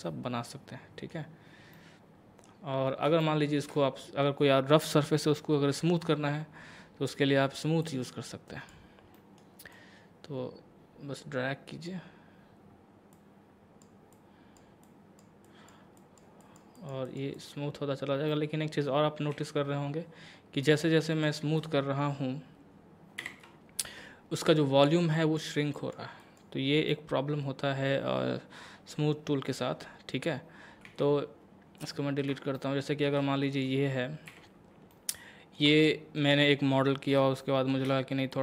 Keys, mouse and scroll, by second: 1.3-1.7 scroll down 1, 1.7 middle click, 2.7 scroll up 1, 3.2 shift+middle click, 7.8-9.2 drag, 9.2 middle click, 9.7-15.5 drag, 18.3 middle click, 19.3 a, 20.6 click, 23.2 ctrl+l, 24.4 click, 26.9-29.5 middle drag, 29.5 Tab, 30.9 x, 31.8 click, 32.6 shift+middle click, 33.5 click, 34.3 a, 34.9-37.4 middle drag, 37.7 shift+scroll up 1.